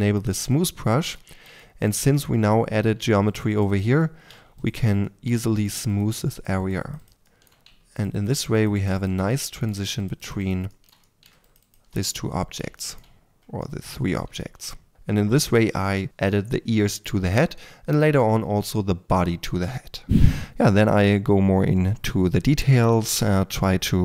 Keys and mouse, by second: 13.6-19.0 middle drag, 20.3 4, 20.4 3, 20.9 click, 21.6-24.0 typing.